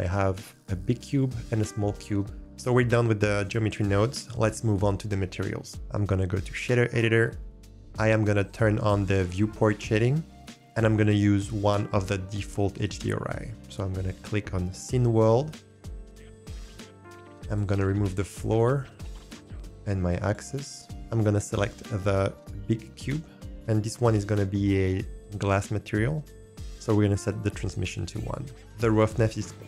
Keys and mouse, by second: 0.9 shift+middle click, 1.8 shift+middle click, 5.8-7.4 drag, 7.6 click, 12.8-17.2 drag, 17.5-20.6 drag, 20.8 ctrl+z, 27.2 click.